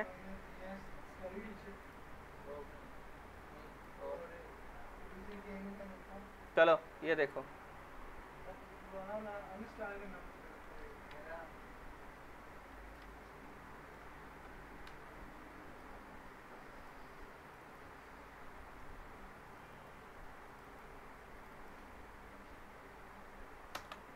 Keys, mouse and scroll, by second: 0.1-0.4 scroll up 2, 0.4-1.0 alt+middle drag, 1.8 click, 2.6 scroll up 1, 3.5 click, 6.4 click, 9.7 alt+Num_Lock, 9.7 click, 9.8 alt+middle click, 10.8 f, 11.1 z, 11.6-12.2 scroll up 1, 12.7 click, 13.0 z, 13.5-14.1 alt+middle click, 14.4 l, 14.9 z, 15.5 click, 16.0-16.8 scroll up 1, 16.8 click, 17.9 scroll down 1, 18.2-18.8 middle drag, 19.5 click, 23.7 ctrl+].